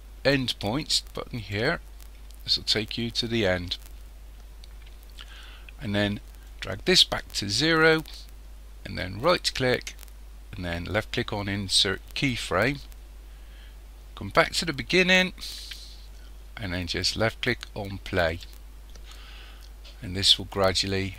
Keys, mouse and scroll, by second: 1.4 click, 6.5 click, 9.3-12.3 right drag, 14.4 click, 18.3 click.